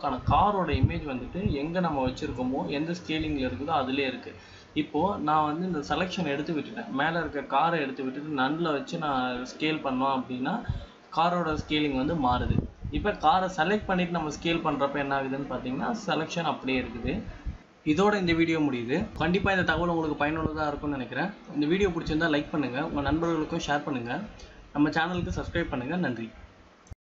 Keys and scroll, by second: 13.2 ctrl+shift+z.